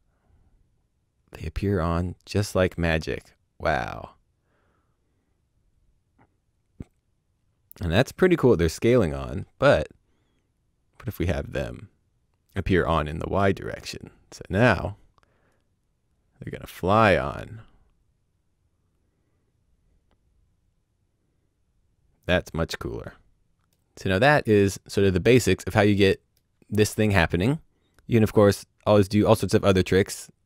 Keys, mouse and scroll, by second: 12.5 click, 15.5 right click, 23.6 middle click, 27.9 right click.